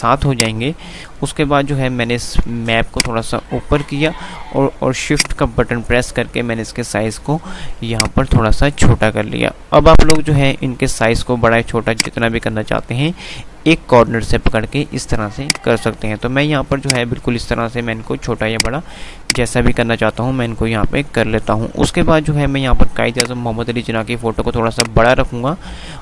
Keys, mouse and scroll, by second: 2.9-4.6 shift+drag, 4.6 r, 5.2-23.2 drag, 23.2-24.9 drag.